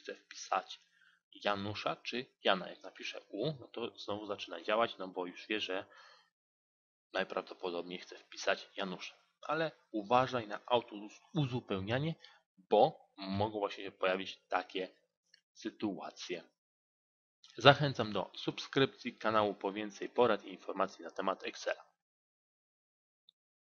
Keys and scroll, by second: 2.6 z.